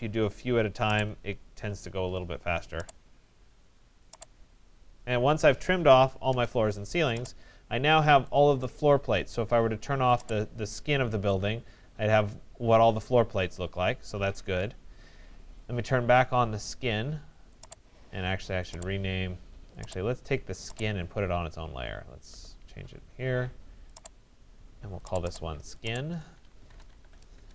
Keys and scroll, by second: 6.0 alt+Return, 26.9 alt+Return.